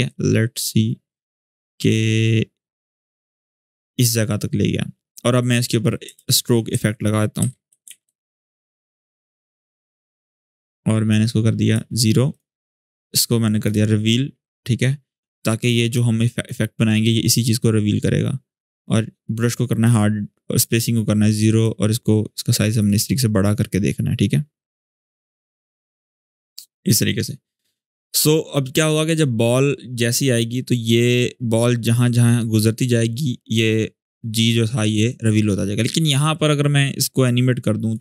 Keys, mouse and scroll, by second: 5.9 ctrl+space, 6.5-8.3 typing, 9.0-11.7 drag, 16.6-18.4 scroll down 1, 18.5-19.7 drag, 28.9 click, 29.0-36.1 drag.